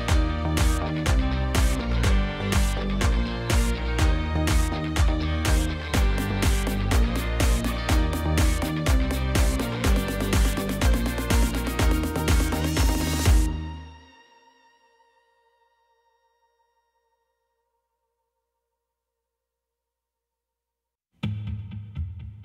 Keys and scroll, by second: 1.8 f, 2.6 a, 3.0 b, 3.3 6, 3.9 Return, 7.9 shift+z, 9.9 shift+d, 10.1 z, 14.1 2, 14.2 5, 14.5 Return, 16.0 g, 16.2 x, 17.7 shift+d, 17.9 z, 20.2 1, 20.3 5, 20.5 Return, 21.5 y.